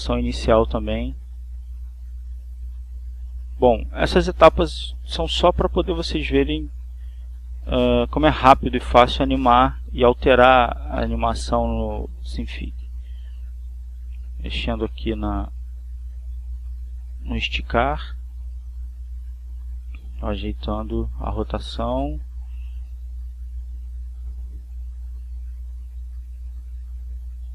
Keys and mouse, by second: 1.1 click, 2.6 click, 4.2 click, 5.1 click, 6.4-7.9 drag, 8.1 click, 9.3-11.0 drag, 12.4 click, 13.2-14.3 drag, 14.9 Right, 17.2 Up, 19.1 click, 20.9-22.0 drag, 22.4-23.7 drag, 25.3-26.4 drag, 26.9-27.5 drag.